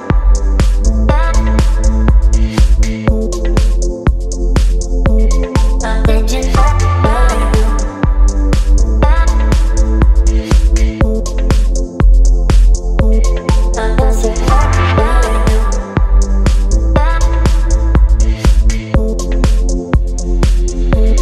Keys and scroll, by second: 0.3 ctrl+t, 5.1 Return, 8.1 ctrl+j, 8.7 ctrl+t, 9.4 v, 9.7 ctrl+t, 13.0 space.